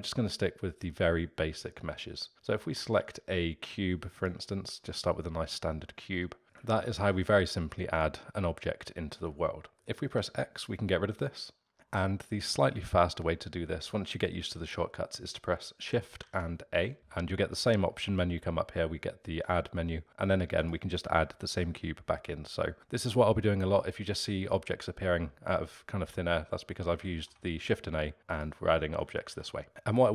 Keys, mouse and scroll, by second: 6.4-10.0 alt+middle drag, 10.0 x, 16.2 shift+a, 21.2-23.9 alt+middle drag, 27.1 shift+a, 29.0 ctrl+z, 29.2 shift+a, 29.3 ctrl+z, 29.5 shift+a, 29.6 ctrl+z, 29.8-30.1 alt+middle drag.